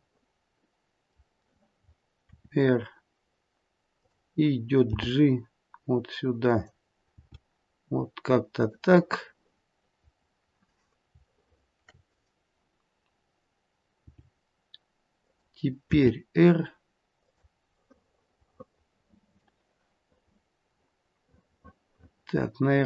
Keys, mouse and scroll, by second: 0.4 middle click, 0.6 middle click, 2.2 r, 4.8 g, 7.1 g, 9.0 middle click, 11.3 shift+middle click, 11.3-11.9 scroll up 2, 14.1 g, 15.8 r, 18.0 middle click, 18.2 middle click, 18.8 middle click, 20.1 middle click.